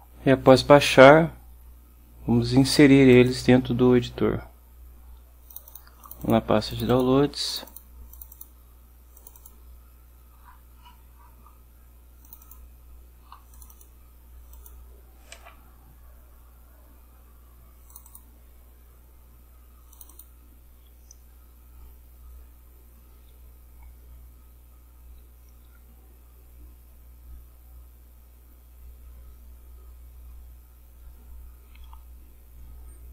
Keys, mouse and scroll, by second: 0.6 click, 3.2 click, 5.6 click, 6.1 click, 6.8 click, 7.6 click, 8.2 click, 9.3 click, 10.5-11.2 scroll up 1, 12.4 click, 13.6 click, 14.7 click, 15.5 d, 16.0 scroll down 2, 18.0 click, 20.0 click.